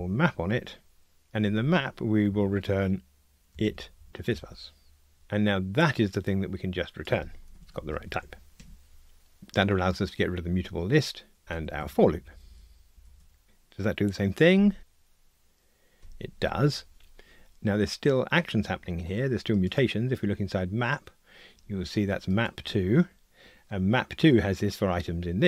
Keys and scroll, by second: 4.3 Return, 8.6 Escape, 11.4 super+BackSpace, 14.6 ctrl+r, 19.7 super+b.